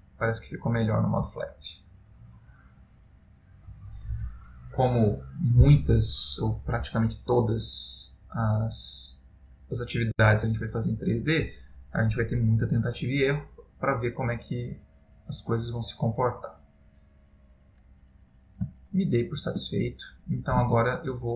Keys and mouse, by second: 13.9 middle click, 18.8 ctrl+middle click, 20.8 shift+middle click.